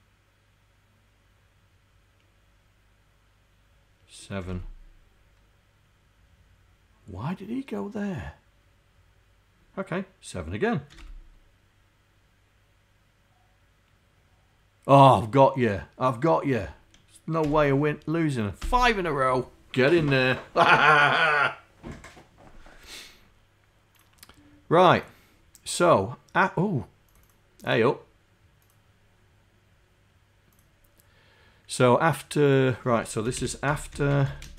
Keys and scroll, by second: 4.5 7, 11.0 Return, 17.5 6, 18.6 Return, 33.5-34.5 typing.